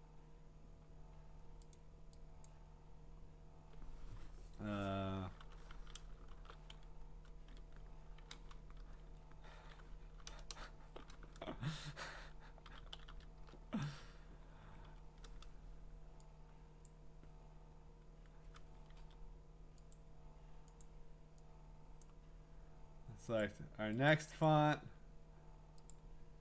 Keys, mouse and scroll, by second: 1.7 click, 2.5 click, 3.2 scroll, 6.3-8.2 typing, 9.2-13.6 typing, 16.9 Up, 16.9-19.9 drag, 18.9 ctrl+a, 20.8 click, 22.0 click, 23.4 click, 24.1 click, 24.5 click, 25.9 click.